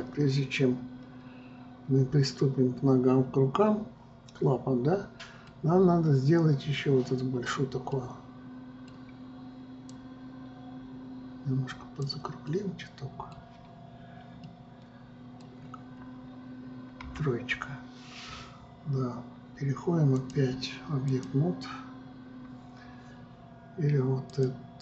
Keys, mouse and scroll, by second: 0.6-3.6 middle drag, 6.3 scroll down 2, 8.5-10.6 middle drag, 10.6-13.1 drag, 13.1-16.1 middle drag, 16.1 scroll down 3, 17.6 KP_3, 20.7-23.9 drag.